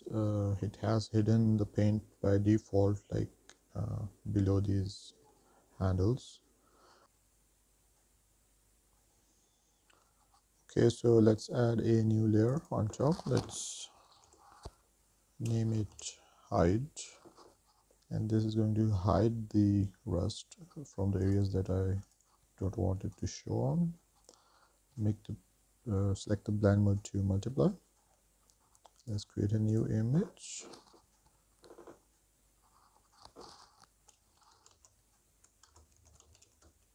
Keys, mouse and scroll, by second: 3.5-5.8 middle drag, 7.0 click, 11.5 click, 12.9-21.5 drag, 22.2-23.4 drag, 27.8-28.6 scroll down 5, 28.6 click, 29.2-36.3 drag, 34.3 BackSpace.